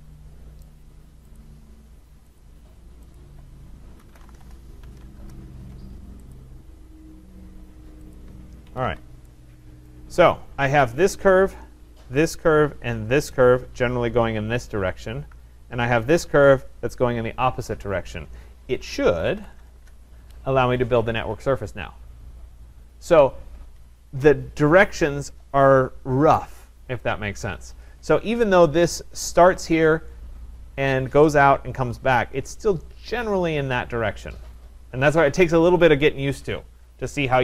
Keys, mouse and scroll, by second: 0.7 right click, 1.4 click, 2.4 click, 3.1 click, 3.8-5.4 typing, 6.4 click, 8.2 click, 8.3 Return, 8.7 Escape, 8.9 Escape, 9.9 right click, 10.8 click, 12.3 shift+click, 13.4 click, 16.1 click, 18.9-19.8 typing, 19.9 Return.